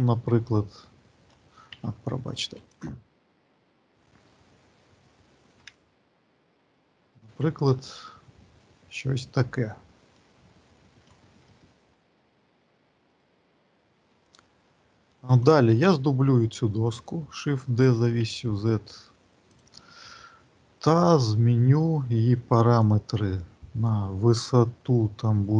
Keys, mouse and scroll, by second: 0.4 alt+middle click, 1.6 z, 2.7 click, 3.7-4.6 scroll down 7, 4.8-5.4 scroll up 1, 5.4 scroll up 1, 5.6 shift+middle click, 7.1 middle click, 7.9-9.9 scroll up 6, 9.9 middle click, 9.9-10.2 scroll up 2, 11.3 shift+middle click, 12.9 click, 13.7 shift+middle click, 17.6 shift+d, 22.7 click.